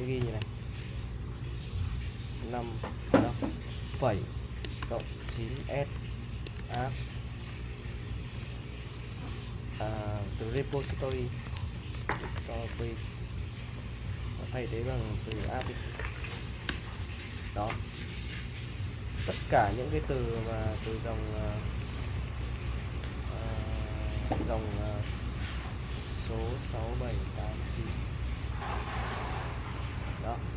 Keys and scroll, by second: 0.2 shift+;, 2.4 5, 3.0 BackSpace, 3.9 ,, 5.0-8.3 typing, 10.2-13.2 typing, 14.7-15.9 typing, 16.7 Return, 21.6-30.5 typing.